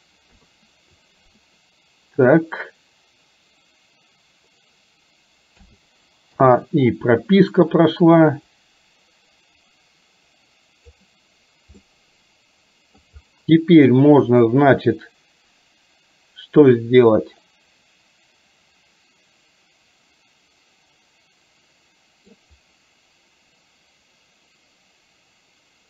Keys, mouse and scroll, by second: 0.4 KP_3, 5.7 a, 6.4 i, 8.5-11.0 drag, 11.9-13.0 middle drag, 14.4-22.4 middle drag.